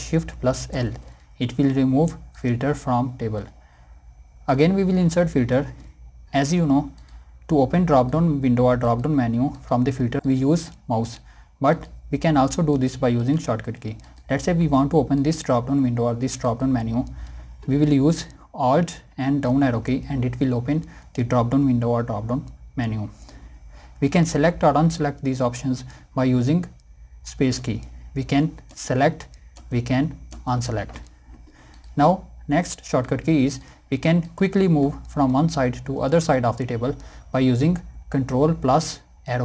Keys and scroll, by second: 18.4 alt+Down, 27.5 space, 38.9 ctrl+Down.